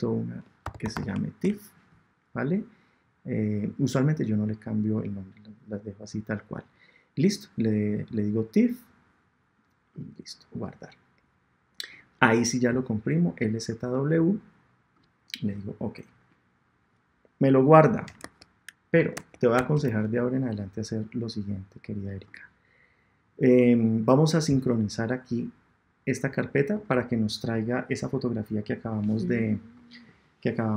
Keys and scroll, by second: 1.4 shift+Return, 2.2 Return, 18.2 super+Tab.